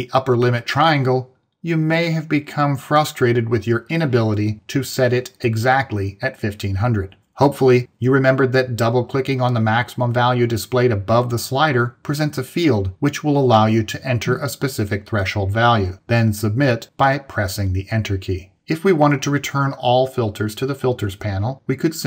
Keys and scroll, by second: 17.5 Return.